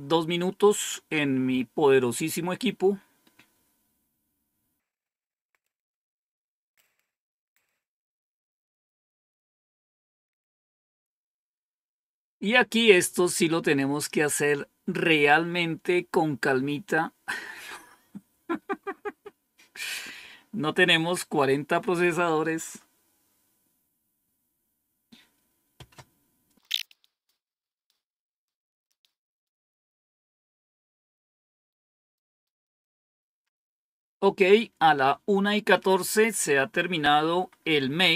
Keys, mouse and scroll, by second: 6.1-6.5 scroll down 1, 37.5 Up.